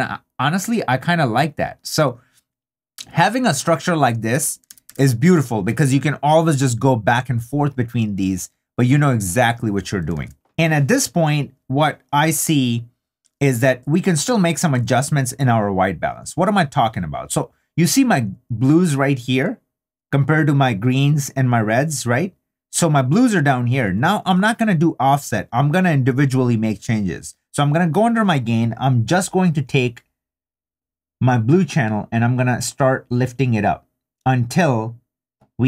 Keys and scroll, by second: 4.7 super+d, 10.1 super+d.